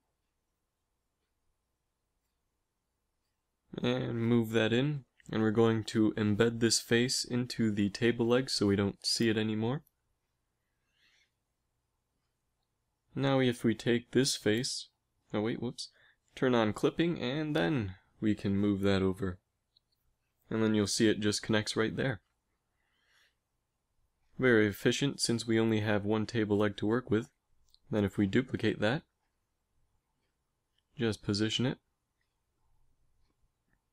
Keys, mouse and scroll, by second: 0.2 z, 0.9 right click, 2.6 z, 3.4 middle click, 3.4 g, 5.2 KP_3, 7.0 g, 8.5 z, 8.8 z, 9.4 g, 10.7 z, 12.5 z, 12.9 z, 13.3 a, 13.4 b, 14.6 g, 17.3 g, 18.3 z, 19.4 a, 25.4 l, 26.7 shift+d, 29.4 KP_1, 29.7 z, 30.6 g, 32.2 z, 33.5 g.